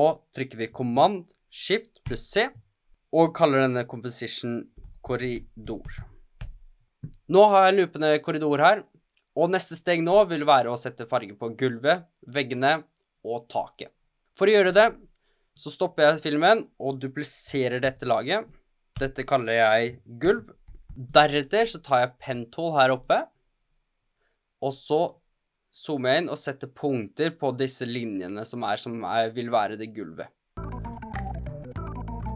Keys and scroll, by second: 2.0 shift+super+c, 4.5-6.8 typing, 18.2 super+d, 19.3 Return, 20.2-21.3 typing, 30.5-32.2 typing.